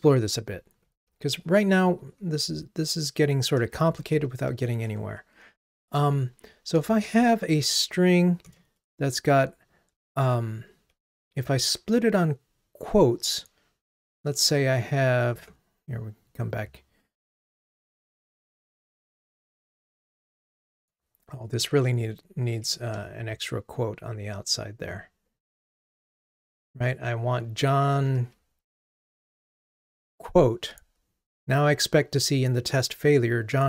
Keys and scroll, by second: 1.3 super+/, 4.8 Tab, 15.6 ctrl+Tab, 28.0 ctrl+r.